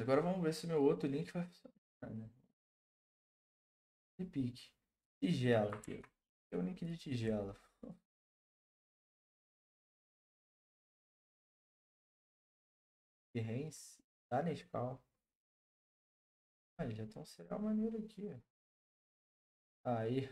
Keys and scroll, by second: 5.8 ctrl+c, 8.2 ctrl+v, 8.7 Return.